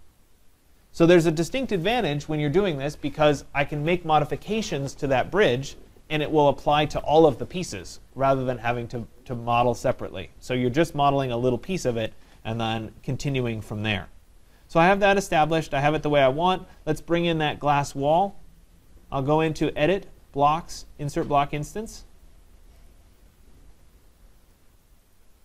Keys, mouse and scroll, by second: 1.9 right click, 19.8 click, 22.9 click, 25.2 click.